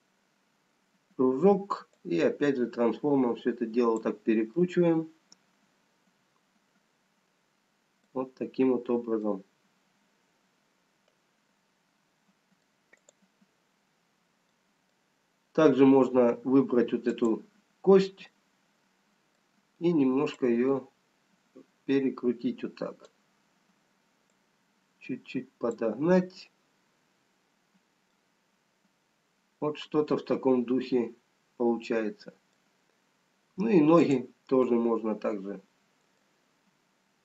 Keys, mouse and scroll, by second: 0.3 middle click, 2.4 click, 5.9 middle click, 10.1 middle click, 13.3 click, 17.0 middle click, 18.7 click, 21.9 click, 24.6 click, 28.2 middle click, 28.2 scroll down 2, 33.2-34.3 scroll up 1, 34.3 click, 34.3-35.2 scroll up 1, 35.7 middle click.